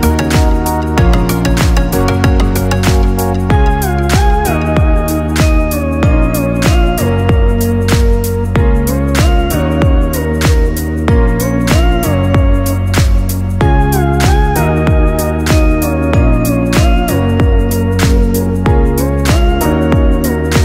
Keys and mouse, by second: 1.9-3.7 middle drag, 3.7 r, 17.1-18.9 middle drag, 18.9-20.6 drag.